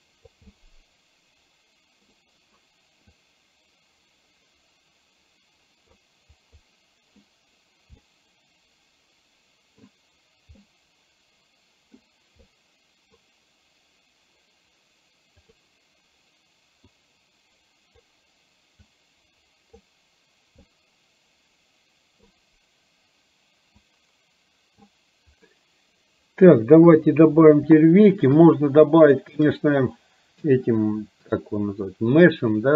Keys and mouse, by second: 0.6-2.1 middle drag, 2.2 middle click, 3.2-5.9 drag, 6.4 click, 8.1-9.9 middle drag, 10.7-11.9 middle drag, 12.4 middle click, 15.6 click, 17.1-18.1 drag, 18.8-19.8 drag, 20.7-22.3 middle drag, 23.8-24.8 drag, 26.8 KP_1, 27.9 shift+middle click, 28.8 shift+middle click.